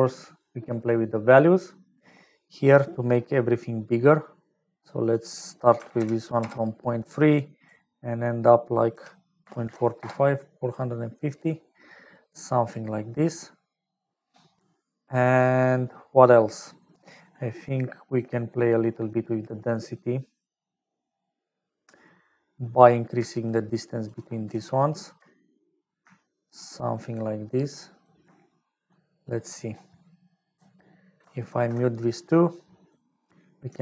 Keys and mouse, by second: 3.6 middle click, 5.2-6.8 drag, 7.5-10.6 drag, 11.9-13.7 middle drag, 14.7 middle click, 23.5 shift+click, 26.9-28.0 shift+drag, 28.9 middle click, 30.0 middle click, 31.3 ctrl+alt+click, 32.6 middle click.